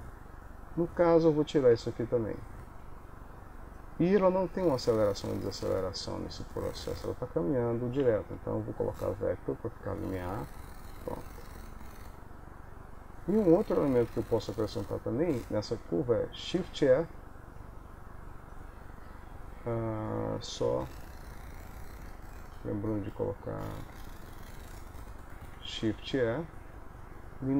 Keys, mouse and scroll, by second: 24.3 n, 25.8 shift+e.